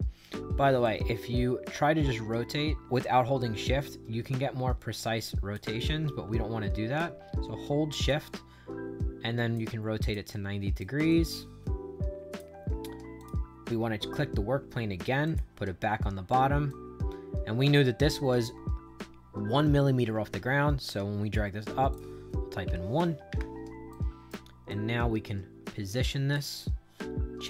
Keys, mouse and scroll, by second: 0.7-5.4 drag, 5.8 ctrl+z, 8.0-9.5 shift+drag, 9.9 click, 10.2 right click, 11.0-12.3 drag, 13.1 click, 15.2 click, 16.6-21.2 drag, 21.8 click, 22.6 1, 23.2 Return, 23.8 right click, 24.6-26.2 drag, 26.5-27.4 right drag.